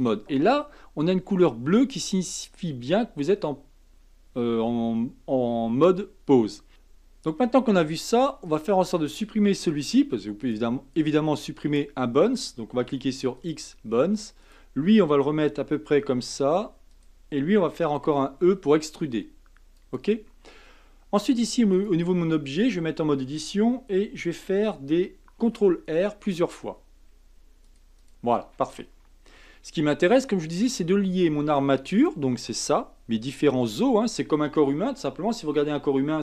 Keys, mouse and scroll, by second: 6.7 Tab, 8.5 click, 9.7 x, 11.6 click, 12.8 x, 14.4 click, 15.5 g, 18.0 e, 21.3 Tab, 21.7 click, 22.5 Tab, 25.4 ctrl+r, 29.4 Tab, 31.9 click.